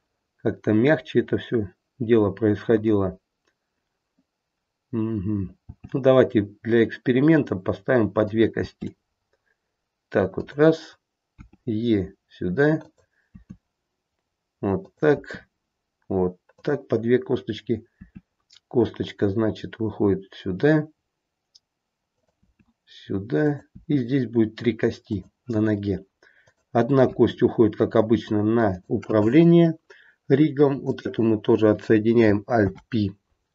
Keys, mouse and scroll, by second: 1.2-1.9 scroll down 1, 1.9 scroll down 2, 2.7-4.4 scroll up 1, 5.6 g, 8.5 g, 11.3 e, 13.3 e, 18.0 e, 22.4 e, 23.6 e, 26.4 click, 27.0 e, 29.4-30.0 scroll up 1, 30.0-30.8 scroll up 2, 30.8 click, 32.5 alt+p.